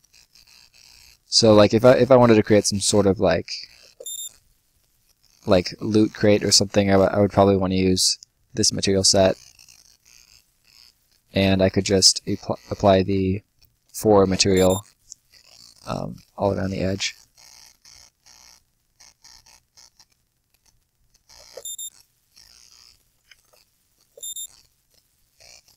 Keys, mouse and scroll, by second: 3.7 space, 4.7 scroll down 1, 4.9 right click, 7.6 click, 9.0 right click, 11.0 scroll up 1, 11.2 right click, 11.6-12.7 scroll up 1, 12.7 click, 13.8 4, 14.3 space, 15.2 right click, 16.0 scroll down 1, 16.3 right click, 20.0 click, 21.3 space, 22.2 right click, 23.4 ctrl+z, 23.9 space, 24.4 scroll up 1, 25.0 right click, 25.5-25.7 scroll up 1.